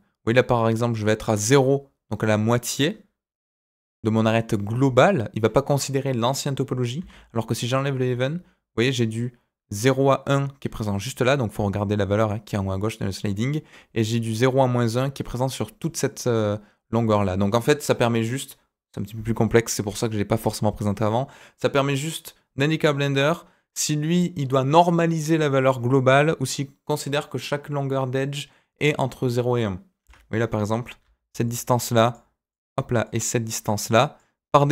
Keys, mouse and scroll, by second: 31.0-34.7 typing, 31.4 click, 31.9 click, 32.5 click, 33.0 click, 33.8 click.